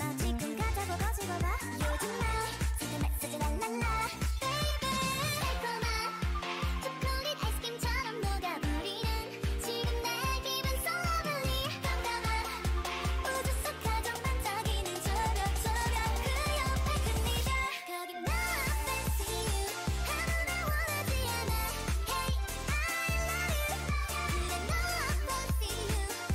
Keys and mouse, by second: 1.4 a, 4.0-6.3 drag, 4.8 shift+e, 5.5 a, 5.8 Tab, 10.9 Tab, 11.7-13.0 right drag, 13.0 g, 15.9 g, 17.8 Tab.